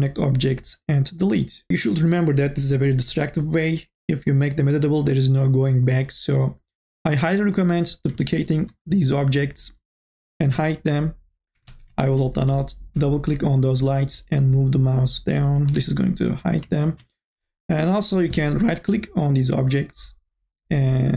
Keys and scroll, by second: 11.9 ctrl+z.